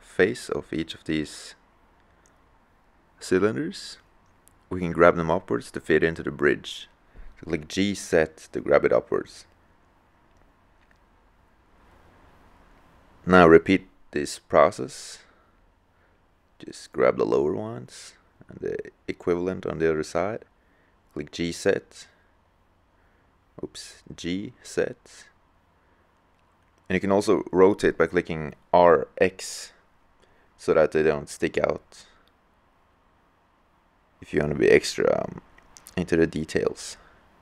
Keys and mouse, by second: 0.8-2.4 drag, 2.4 middle click, 6.2 click, 7.5 g, 15.5-18.2 middle drag, 20.6 g, 23.4 g, 28.9-30.8 drag, 31.5-36.8 drag, 36.3 g.